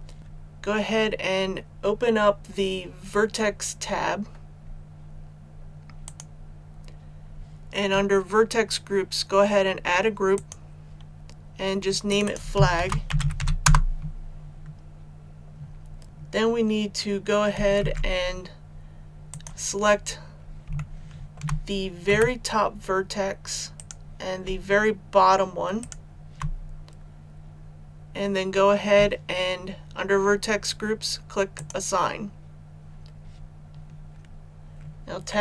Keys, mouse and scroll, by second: 6.0-11.3 drag, 12.7-13.3 typing, 13.6 Return, 17.7 Tab, 19.2 click, 19.9 scroll up 1, 20.7 shift+middle click, 22.0 shift+a, 23.7 right click, 25.7 shift+right click, 31.5 click.